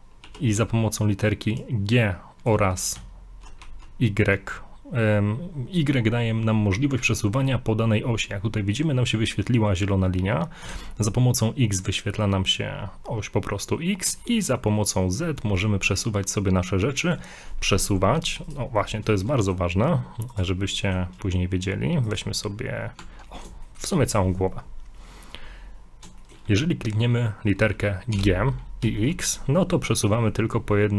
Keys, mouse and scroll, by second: 0.3 g, 18.7 scroll down 4, 19.1 shift+middle click, 19.4 middle click, 20.3 right click, 20.8 middle click, 22.1 right click, 23.0 Tab, 23.3 Tab, 23.5 middle click, 23.7 shift+middle click, 24.0 middle click, 26.2 shift+middle click, 28.2 g.